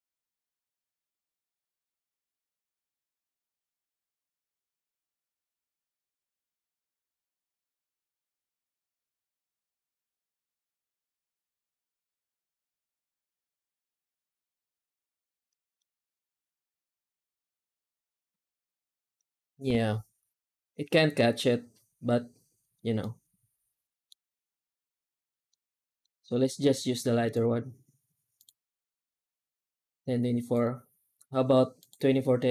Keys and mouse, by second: 15.4 middle click, 22.9-23.9 middle drag, 25.5 middle click, 27.2-28.3 drag, 30.4-31.8 drag.